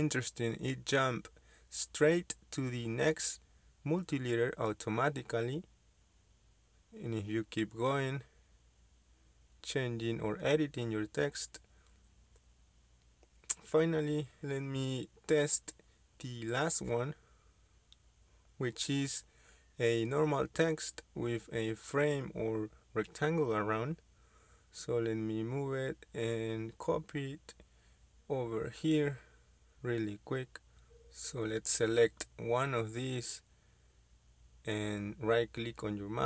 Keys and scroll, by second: 0.0-0.8 typing, 5.1-5.8 typing, 9.4-10.1 typing, 13.3 Escape, 17.0 Delete, 19.8 Escape, 20.6 Escape, 22.4 m, 23.0 Escape, 23.8-24.2 typing, 32.3 shift+Escape.